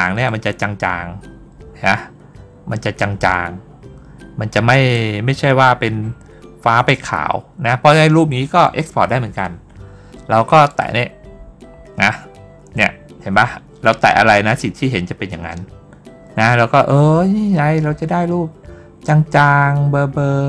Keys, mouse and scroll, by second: 0.1-4.8 drag, 10.5 click.